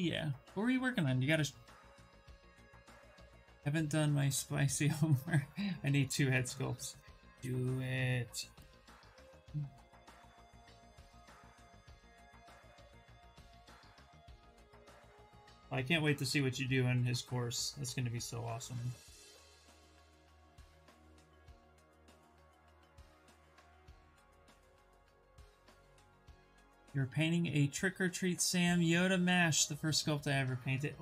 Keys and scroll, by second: 8.9 s, 16.1 s, 18.3 s.